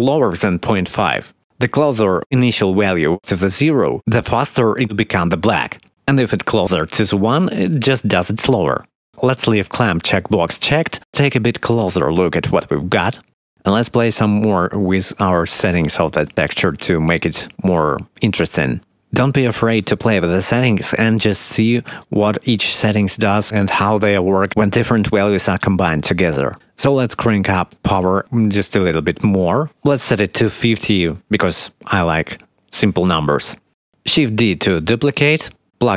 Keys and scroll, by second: 31.7 5, 31.8 0, 31.9 Return, 34.7 shift+d.